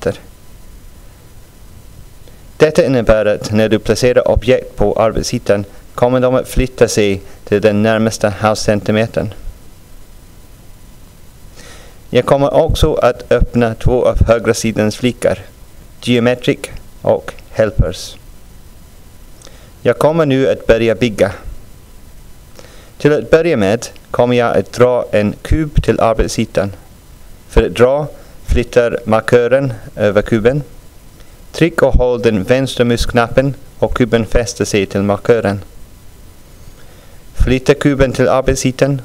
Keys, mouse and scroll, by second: 1.2 click, 13.5 click, 15.0 click, 37.7-39.0 drag.